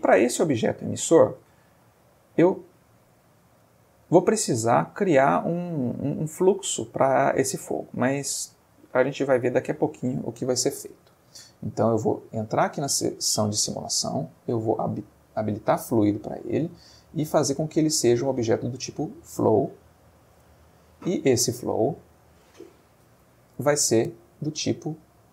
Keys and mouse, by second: 0.4-1.0 middle drag, 1.8-2.7 ctrl+middle drag, 2.9-3.6 ctrl+shift+middle drag, 7.4-8.8 middle drag, 9.1-9.6 ctrl+shift+middle drag, 11.8 click, 14.8 click, 16.4 click, 18.7 click, 20.8 ctrl+middle click, 21.6 ctrl+middle click, 23.5 Home, 24.3 click.